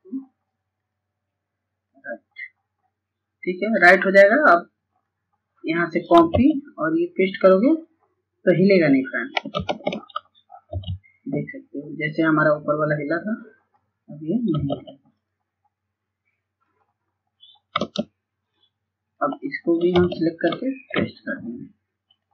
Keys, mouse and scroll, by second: 6.4 click, 8.8 ctrl+a, 11.5 click, 14.3 click, 17.0 ctrl+space, 17.7 click, 21.4 click.